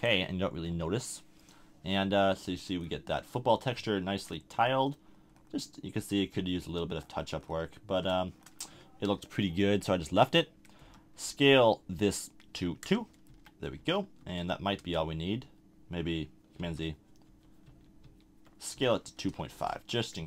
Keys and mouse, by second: 0.0-2.8 drag, 10.8 s, 13.3 a, 13.8 a, 14.2 Tab, 14.8 Tab, 16.6-18.7 typing.